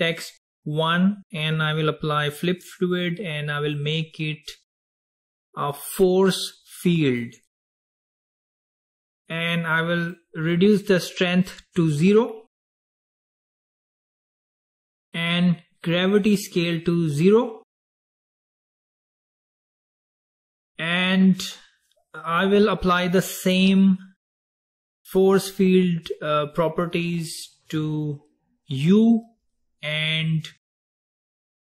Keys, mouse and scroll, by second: 0.1 click, 2.6-6.9 drag, 10.1-13.3 drag, 16.4-19.5 drag, 28.9 click, 30.9 click, 31.4 click.